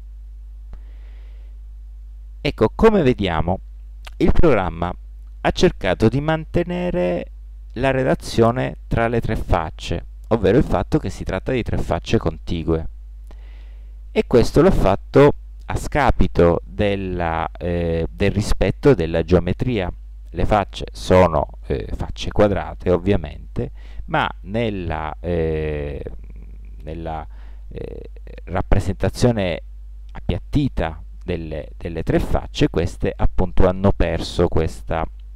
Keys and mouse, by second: 2.1-4.5 middle drag, 21.5-23.5 middle drag.